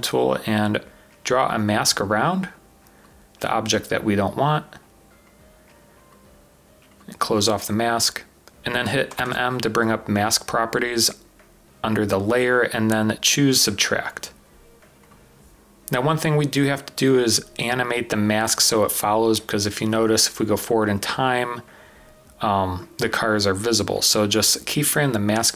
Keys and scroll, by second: 3.9 typing, 9.1 m, 9.3 m, 10.8 typing.